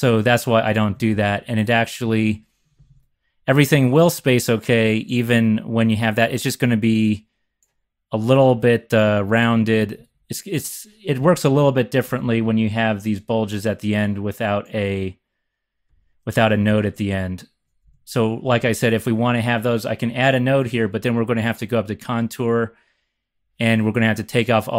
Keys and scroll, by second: 0.9-2.9 typing, 9.6 x, 9.8 x, 9.9 x, 10.1 x, 11.2 x, 12.0 z, 12.1 z, 12.4 z, 16.4 Down, 16.6 Down, 17.8 x, 18.4 x, 18.6 x.